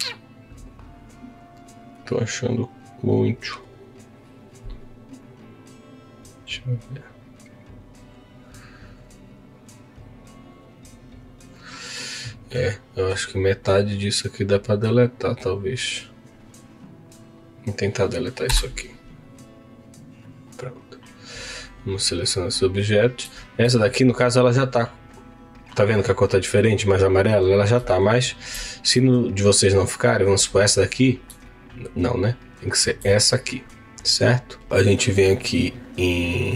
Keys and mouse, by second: 12.6 middle click, 13.8-17.5 drag, 19.5 Delete, 20.2 click, 20.6-22.0 right drag, 23.9 middle click, 29.7 shift+click.